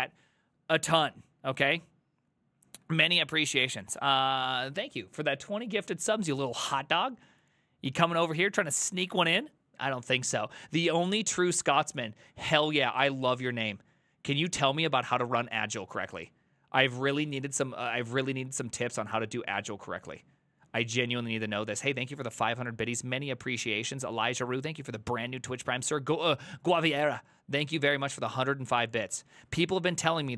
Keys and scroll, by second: 9.2 alt+f.